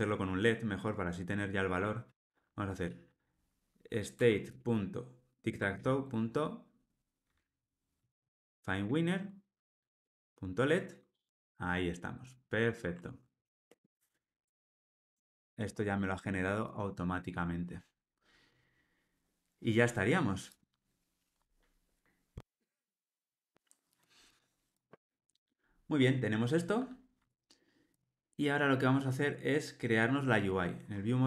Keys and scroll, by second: 4.2 Return, 13.0 alt+super+l.